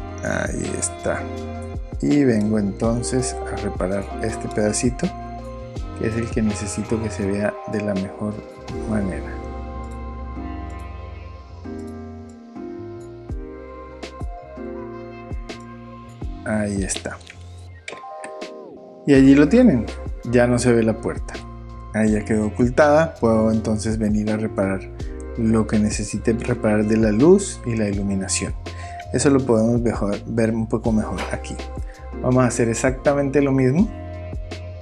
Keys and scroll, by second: 17.9 super+o, 18.1 super+0.